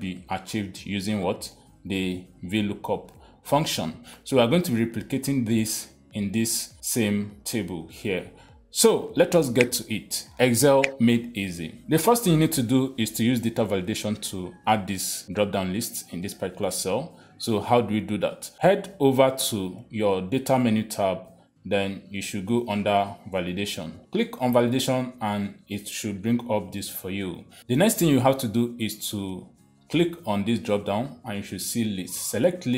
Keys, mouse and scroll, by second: 1.2 click, 2.1 click, 3.5 click, 5.1 click, 5.9 click, 6.9 click, 7.5 click, 8.2 click, 12.5 click, 16.3 click, 19.0 click, 20.7 click, 24.0 click, 25.9 click, 30.3 click, 32.3 click.